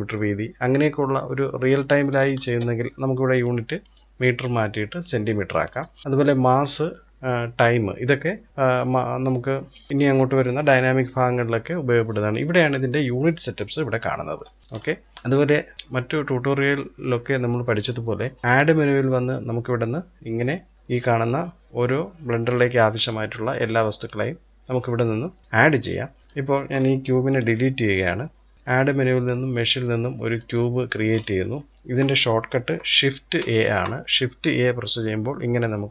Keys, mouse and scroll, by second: 3.3 click, 14.5-15.1 scroll up 1, 15.1-16.5 shift+middle drag, 18.1-20.7 drag, 26.2 click, 26.8 Delete, 28.4-30.5 drag, 30.5-30.9 scroll up 1, 30.9-32.8 shift+middle drag, 32.8 shift+a.